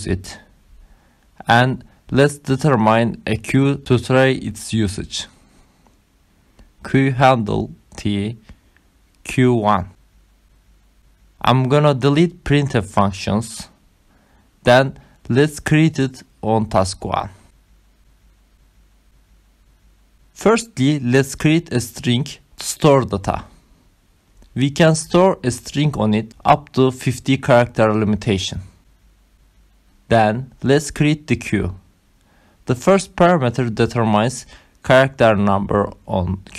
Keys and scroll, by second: 0.2 Left, 0.5 Down, 1.3 Left, 1.4 Down, 2.2 Down, 3.2-10.7 typing, 11.7 Return, 17.5 BackSpace, 18.5 BackSpace, 19.5 Return, 20.2-22.9 typing, 22.6 Right, 24.4 Return, 25.8-35.0 typing, 35.2 Return, 35.6 Right, 36.4 shift+,.